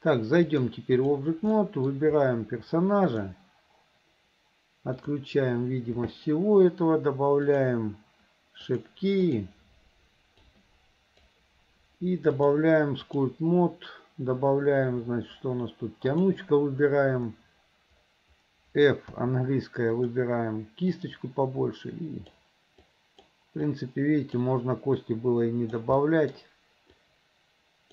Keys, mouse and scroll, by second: 0.5-1.2 drag, 1.6 middle click, 3.1 click, 5.0 click, 7.5 click, 8.7 click, 10.6 click, 12.4 click, 16.1 click, 20.0 f, 21.0-22.4 drag, 22.9 click, 23.7 click, 25.0 click, 26.0 middle click, 27.0-27.9 drag.